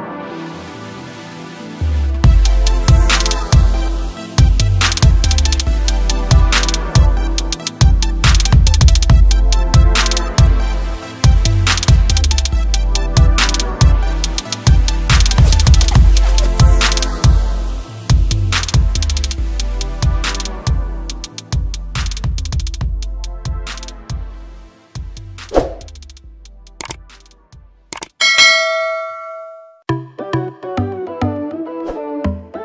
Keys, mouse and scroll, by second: 8.5 ctrl+Num_Lock, 9.6 ctrl+n, 11.5-12.4 scroll down 1, 12.4 click, 13.7 Left, 13.7 click, 22.1 click, 24.8 click, 27.3 click, 27.5 space.